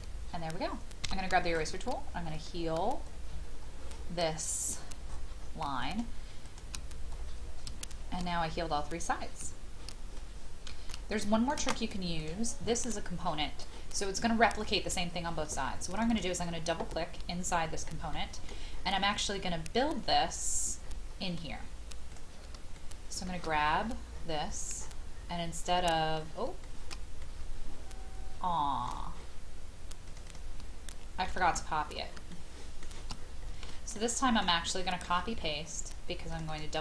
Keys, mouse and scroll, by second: 1.0-1.5 scroll down 1, 1.5 scroll up 1, 2.3 shift+click, 2.8-4.3 scroll down 1, 4.3-5.1 scroll up 1, 5.8 shift+click, 6.4 shift+click, 6.8 scroll down 1, 7.8 shift+middle click, 8.1 shift+middle click, 8.2 scroll down 1, 10.1-10.9 shift+scroll up 1, 11.1 middle click, 12.2-13.3 drag, 18.1 middle click, 18.7-19.8 scroll up 1, 19.8-22.1 scroll down 1, 22.1 click, 22.7 shift+middle click, 23.8-25.9 scroll up 1, 25.9-26.4 scroll down 1, 26.6-29.5 shift+middle drag, 30.0 click, 31.2 ctrl+c, 31.7-32.1 scroll down 1, 32.3 shift+middle click, 33.1-33.7 scroll down 1, 33.9 shift+middle click, 34.7 middle click, 35.3-36.3 scroll up 1, 36.3 click.